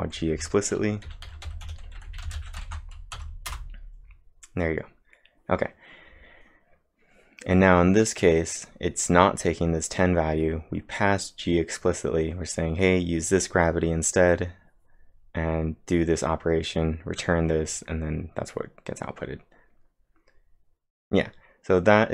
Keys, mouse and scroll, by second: 0.0-4.0 typing, 0.3 Left, 2.7 ctrl+`, 3.2 Up, 5.2-5.9 typing.